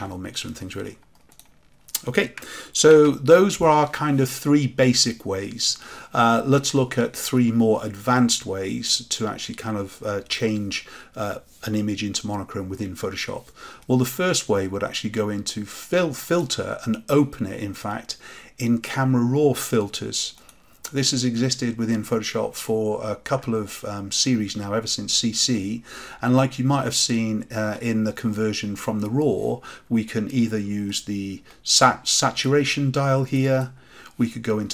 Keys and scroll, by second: 2.8 ctrl+z.